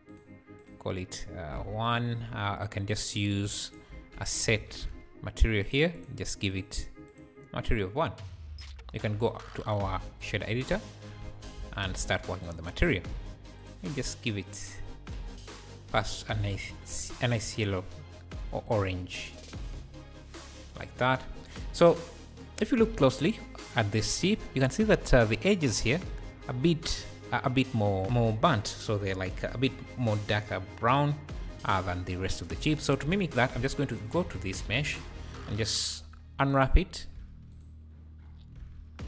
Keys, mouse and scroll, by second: 0.1-1.9 drag, 2.3-2.7 scroll up 3, 2.7 click, 3.5 shift+Right, 3.9 shift+a, 6.5-8.7 drag, 11.2 a, 11.6 KP_Decimal, 12.3 click, 12.9-13.6 scroll up 4, 13.6 click, 14.0 click, 17.8-18.7 scroll up 4, 18.7 click, 21.0 click, 22.3-22.9 scroll up 1, 32.2-32.5 scroll down 4, 33.1 Tab, 33.5 a, 33.9 scroll down 3, 34.2 `, 36.0 i, 37.1 u, 37.6 u, 38.1-38.5 scroll down 5, 38.5 a, 38.9-39.0 scroll up 1.